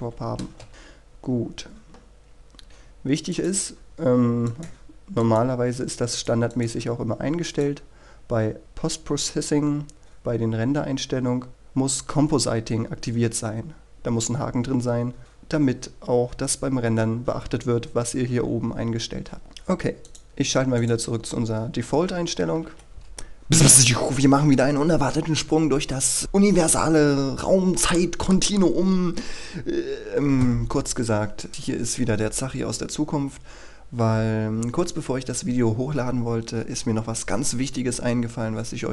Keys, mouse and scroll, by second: 0.9 shift+space, 4.5 click, 8.6-13.3 scroll down 1, 15.2 click, 22.8-23.1 scroll down 1, 23.1 click.